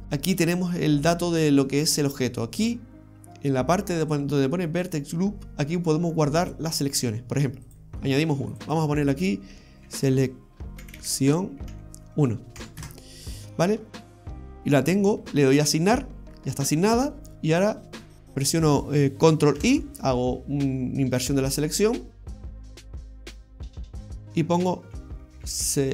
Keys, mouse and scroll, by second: 7.7 click, 8.6 click, 8.7 click, 11.0 c, 15.8 click, 19.6 ctrl+i, 23.1 click, 24.1 click, 24.2 click.